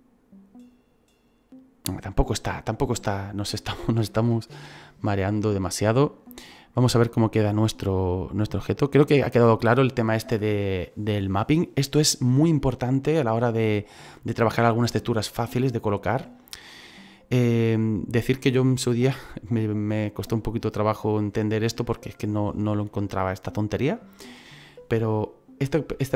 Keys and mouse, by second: 4.0 KP_0, 10.0 right click, 17.6 click.